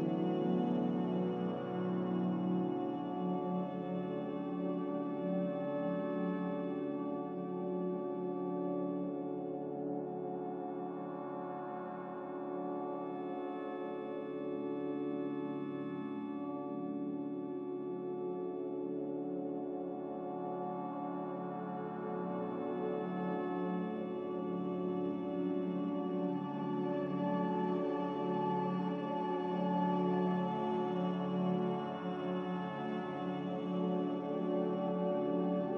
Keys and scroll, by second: 8.7 c, 16.2 v, 26.2 z, 28.7 c, 29.8 Escape, 32.8 v, 34.6 Escape.